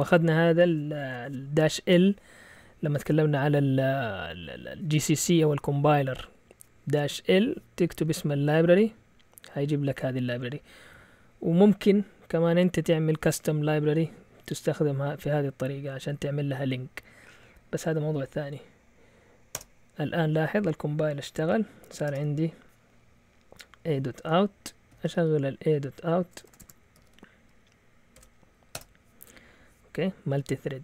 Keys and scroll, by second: 19.5 Return, 21.6-22.4 typing, 24.7-27.6 typing, 28.1 Tab, 28.7 Return, 30.5 Up.